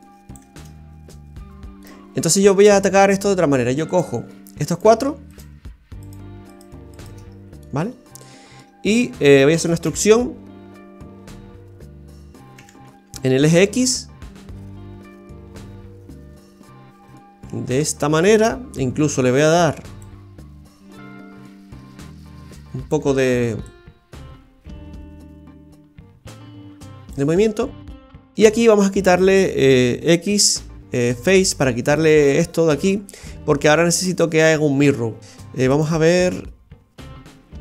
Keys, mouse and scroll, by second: 0.6 scroll down 3, 1.8 right click, 3.9 click, 4.7 right click, 6.1 shift+right click, 6.5 shift+right click, 6.9 shift+right click, 7.4 scroll down 2, 7.6 middle click, 9.8 e, 20.0 click, 23.6 click, 27.7 scroll up 2, 28.0 shift+middle click, 28.3 scroll up 1, 28.7 middle click, 30.3 x, 33.7 middle click, 35.7 click.